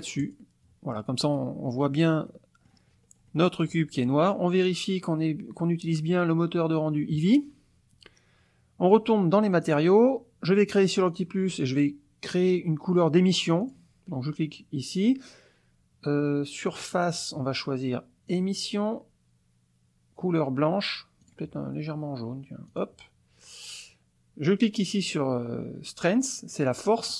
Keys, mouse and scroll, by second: 0.2 click, 2.3 click, 3.0-3.3 scroll up 1, 3.3 click, 4.6 click, 9.5 click, 11.1 click, 13.6 click, 17.0 click, 18.3 click, 21.2 click, 22.7 click, 26.7 click.